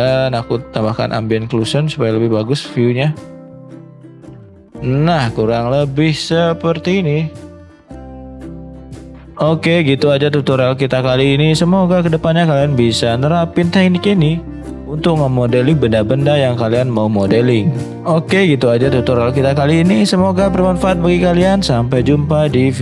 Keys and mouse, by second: 9.0-22.8 middle drag.